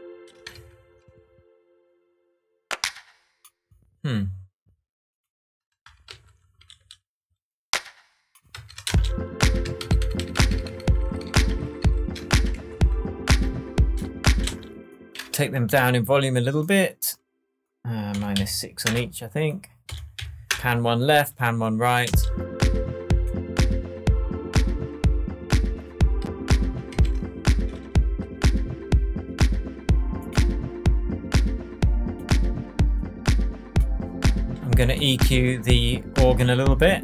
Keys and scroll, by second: 0.4 space, 0.5 super+z, 6.1 super+j, 8.5 super+d, 8.8 super+space, 9.8 super+d, 12.4 shift+super+d, 12.5 shift+super+Tab, 14.4 space, 15.3 shift+space, 17.9-18.8 typing, 19.8 -, 20.1 6, 20.5 Return, 22.0 space, 26.9 super+s.